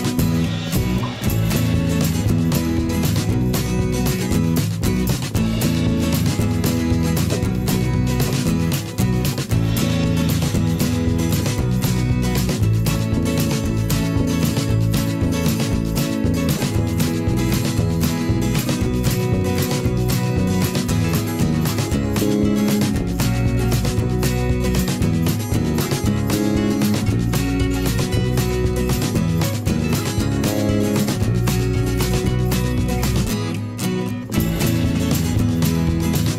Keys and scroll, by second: 1.3 ctrl+z, 5.4 ctrl+z, 6.9 ctrl+z, 8.8 ctrl+z, 14.4 ctrl+z, 16.3 v, 28.7 t.